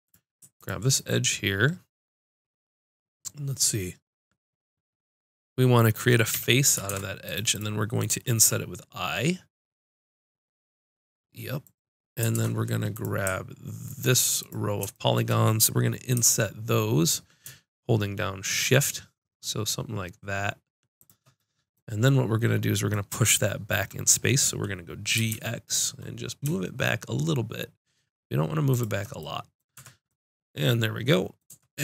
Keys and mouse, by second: 0.5-2.6 drag, 6.3 f, 6.9 ctrl+Tab, 7.5-9.5 drag, 8.4 i, 11.7-13.5 drag, 12.3 ctrl+Tab, 13.8-16.1 drag, 16.1 i, 21.3-25.1 middle drag, 25.1 g, 28.8-30.3 drag, 29.7 Tab, 31.5 Tab.